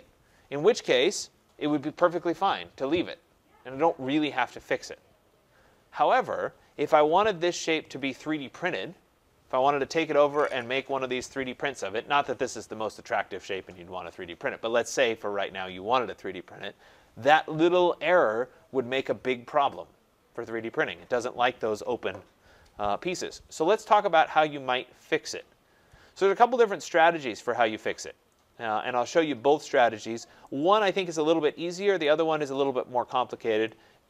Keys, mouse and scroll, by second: 24.1-25.1 scroll, 25.1 scroll, 27.0 right click, 27.4 scroll, 30.3 right click, 30.6 middle click, 30.7 middle click, 30.7 middle click, 30.8 middle click, 32.0 right click, 32.3 scroll, 33.1 scroll.